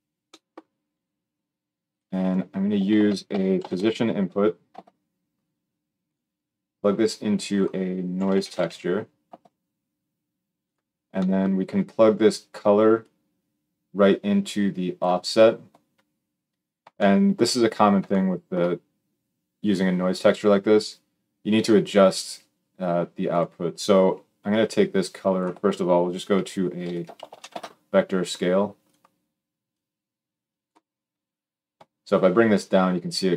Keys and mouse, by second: 1.6 click, 2.7 shift+a, 6.6-10.5 drag, 10.5-13.0 middle drag, 13.0-23.1 drag, 23.1-24.5 middle drag, 24.5-28.7 drag, 28.7-29.5 middle drag, 29.5-33.3 drag.